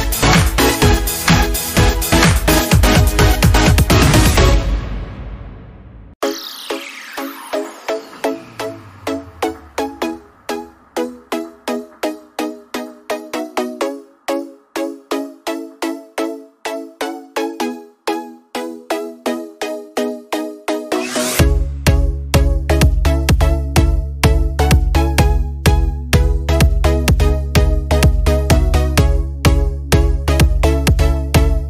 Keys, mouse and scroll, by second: 0.5 scroll down 1, 2.1 space, 2.3 click, 2.6 space, 3.5 click, 3.7 space.